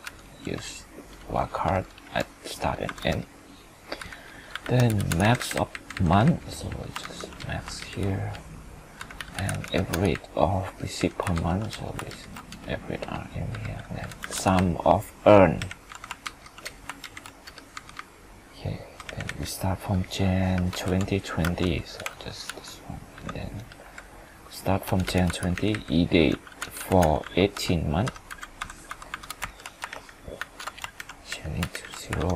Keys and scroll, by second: 7.0 ctrl+Up, 7.8 ctrl+shift+Down, 12.1 ctrl+shift+Down, 16.2 ctrl+Up, 17.0 ctrl+shift+Down, 29.4 ctrl+Return, 29.9 ctrl+shift+Right, 30.7 ctrl+shift+3, 31.0 ctrl+Right, 31.7 ctrl+shift+Right, 32.2 ctrl+0.